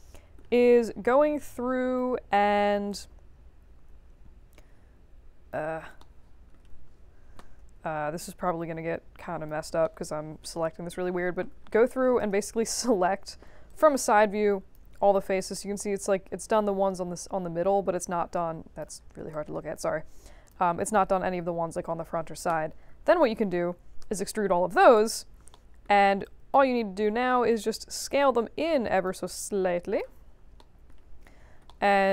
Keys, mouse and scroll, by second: 0.7 q, 1.0 1, 1.4 right click, 2.8-5.5 drag, 5.9 alt+middle click, 6.9 4, 8.2-9.4 shift+drag, 9.8 alt+middle click, 11.2 5, 11.7 alt+middle click, 12.1 space, 12.9 space, 13.6-14.7 alt+drag, 15.0 4, 15.3-18.8 alt+drag, 19.0 middle click, 19.3-20.5 drag, 23.9 ctrl+e, 25.5 alt+middle click, 26.2 alt+click, 27.5-29.0 drag, 29.2 alt+click, 30.2 middle click, 30.5 alt+middle click, 31.6 alt+middle click.